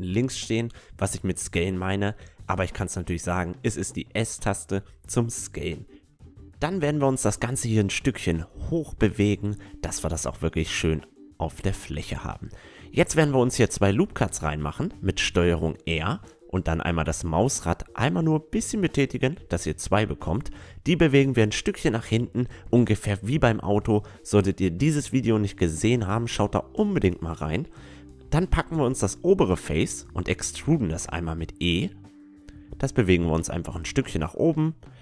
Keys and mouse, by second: 0.0 KP_5, 0.8-2.7 right drag, 1.6-3.2 drag, 3.6 middle click, 4.4-6.2 drag, 7.3 middle click, 7.8 a, 11.5 Tab, 12.2 a, 12.6-13.9 middle drag, 13.3 ctrl+r, 14.9-16.8 right drag, 15.2-16.6 drag, 15.8 ctrl+r, 16.7 middle click, 23.1 a, 23.4-24.7 middle drag, 24.7-26.6 drag, 25.2-26.9 right drag, 25.6-28.6 middle drag, 27.0 e, 32.6 middle click, 34.4 a, 34.8 ctrl+r.